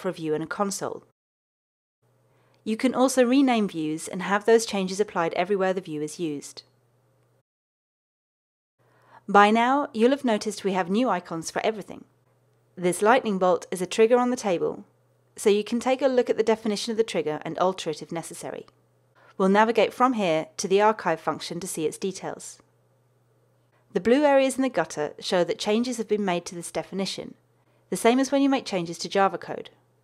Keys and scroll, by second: 20.5 super+b.